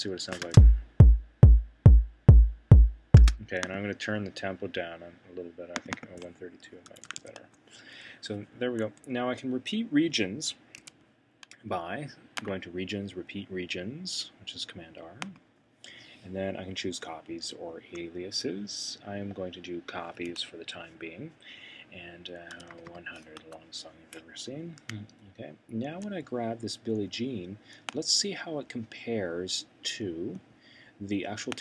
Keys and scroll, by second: 6.6-8.4 typing, 10.8 c, 22.2-24.4 typing.